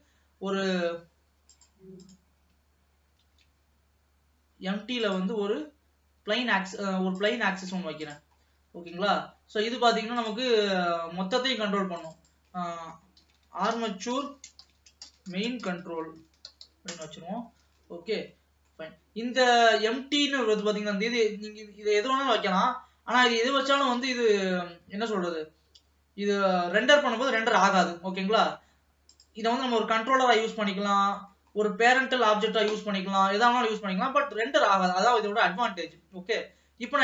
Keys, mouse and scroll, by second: 1.5 click, 2.1 click, 3.3 shift+a, 8.4 click, 8.5-9.3 scroll up 2, 9.3 ctrl+s, 10.2 click, 12.0 click, 12.2-15.2 drag, 17.5 ctrl+s, 18.2 scroll down 1, 18.4 middle click, 19.0-20.1 scroll up 1, 20.1 shift+a, 30.4-31.6 middle drag, 31.6-32.2 scroll up 2, 32.2 middle click, 33.0 scroll down 1, 33.3 ctrl+s, 33.5 middle click, 34.1-34.5 scroll down 1, 34.5 middle click, 35.4 ctrl+s, 35.5-36.2 scroll down 1, 36.2-36.7 scroll up 1, 36.7-37.0 scroll down 1.